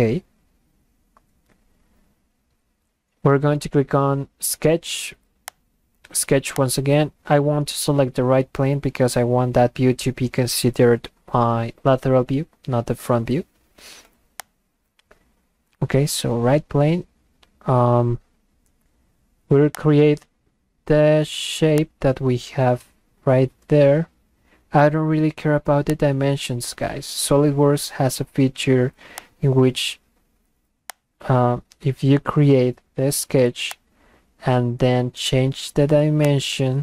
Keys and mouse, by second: 5.5 click, 6.5 click, 14.4 click, 19.8 click, 21.8 click, 25.9 click, 29.2 click, 30.9 click, 33.7 click, 36.3 click.